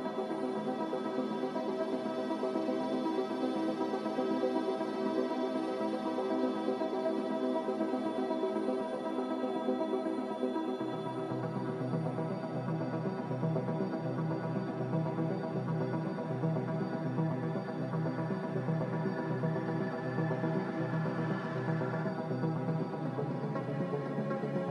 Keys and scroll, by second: 2.0-3.3 typing, 4.6 s, 12.7 a, 18.0 ctrl+c, 21.0 ctrl+v, 21.5 ctrl+g.